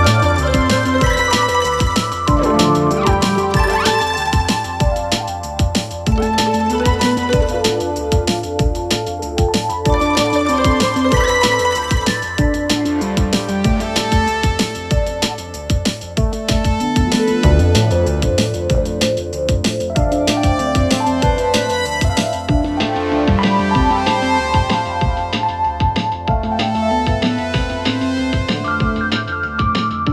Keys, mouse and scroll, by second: 1.6-1.9 alt+scroll up 2, 2.4-3.2 drag, 4.4-4.8 alt+scroll down 1, 5.7 click, 6.3 alt+scroll up 1, 7.3 click, 8.0 ctrl+z, 8.8 click, 9.2 space, 9.4-9.8 click, 9.8 alt+space, 10.0 alt+scroll up 1, 10.3-12.4 drag, 12.4-13.1 alt+scroll down 2, 13.1-14.0 scroll down 1, 14.0 scroll up 2, 14.8 click, 15.9 alt+scroll up 1, 16.4 space, 16.5-16.9 click, 16.8 space, 17.9 click, 18.1 space, 18.6 alt+scroll up 1, 19.4-20.1 drag, 20.9 ctrl+z, 21.5 click, 23.2 ctrl+z, 23.9-27.9 drag, 27.9-28.4 alt+scroll down 1, 28.6-29.5 alt+scroll up 1, 29.5 click.